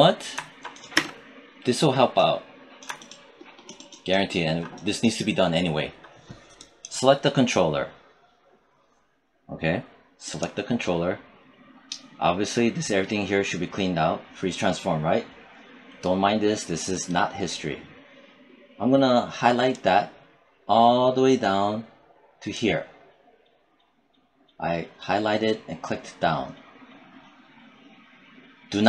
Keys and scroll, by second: 0.7 space.